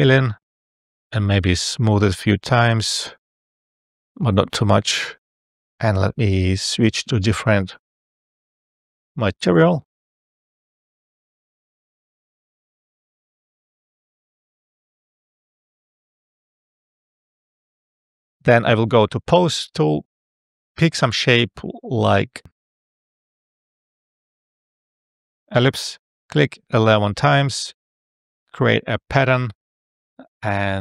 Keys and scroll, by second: 2.2 F12, 19.5 e, 22.8 space, 26.8 1.